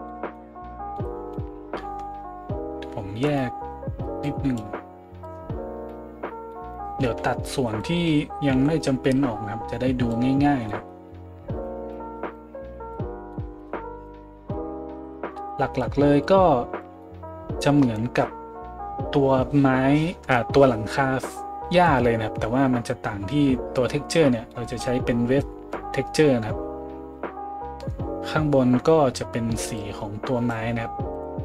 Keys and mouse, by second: 15.2-15.6 middle drag, 15.6-31.2 drag, 31.2-31.4 middle drag.